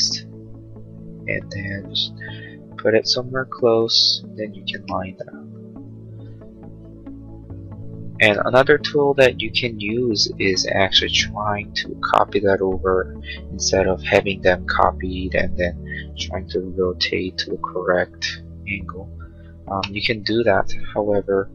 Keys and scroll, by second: 15.5 q, 19.7 space.